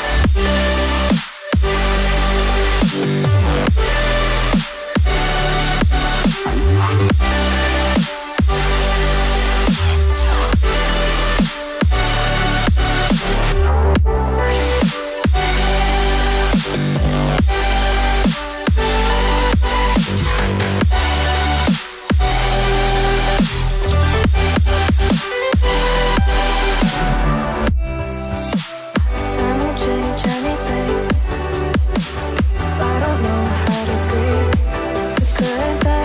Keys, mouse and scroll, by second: 4.7 right click, 8.0 right click, 23.6-26.3 typing, 24.9 Tab, 26.7 Tab.